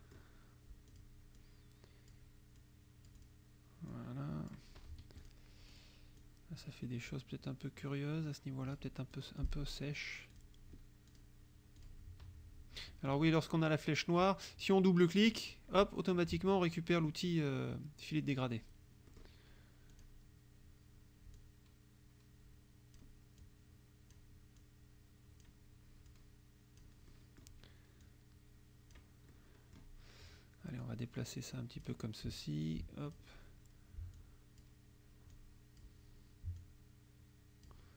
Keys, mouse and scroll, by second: 0.9 click, 1.4 click, 2.6 click, 3.9 click, 5.1 F1, 5.2 click, 5.8 click, 6.3-9.0 drag, 9.2 click, 10.4 click, 11.1 click, 11.9 click, 12.8 F1, 13.1 click, 15.2 click, 19.1 click, 20.0 click, 21.4-23.2 drag, 23.5 click, 24.6 click, 26.1 click, 27.1 click, 28.1-29.2 drag, 29.4 click, 30.9-32.1 drag, 32.7 click, 33.9 click, 35.4 click, 36.6-37.9 drag.